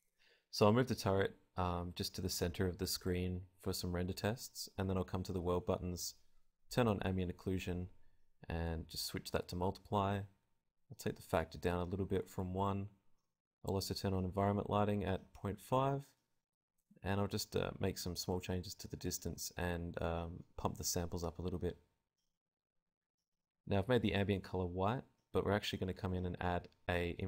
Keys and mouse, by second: 2.0 click, 7.0 click, 8.2-10.0 drag, 11.9-16.0 drag, 16.8-17.9 drag, 19.0 click, 24.5 Escape, 26.2-27.2 drag.